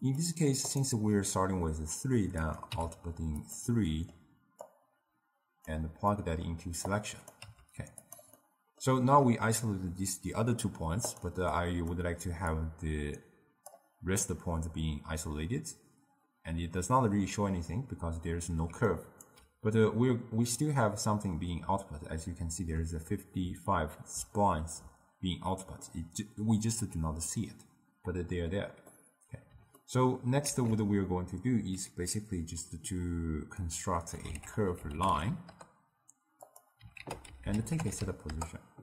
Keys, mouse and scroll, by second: 0.1 click, 2.5-3.6 drag, 3.9-4.7 middle drag, 4.7-6.1 drag, 6.1-6.9 middle drag, 6.9-7.5 drag, 7.5 g, 8.4-11.1 middle drag, 11.1 drag, 11.6 click, 12.6-15.6 drag, 18.8 d, 18.9 right click, 19.4 d, 21.8 d, 29.0-30.5 middle drag, 30.5 ctrl+a, 37.1 ctrl+a.